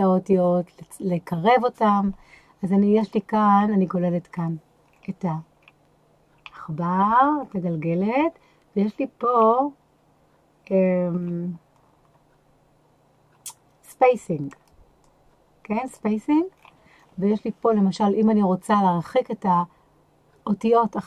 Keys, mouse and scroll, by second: 3.0 click, 3.5 scroll down 2, 4.4-4.9 scroll up 1, 4.9-5.6 scroll up 1, 5.6-6.4 scroll down 1, 6.4-7.1 scroll down 1, 7.4-8.1 scroll down 1, 9.3-9.9 scroll down 1, 9.9-11.2 scroll down 1, 11.2-14.5 scroll down 1, 14.5 click, 15.9 click, 16.6-17.8 scroll down 3.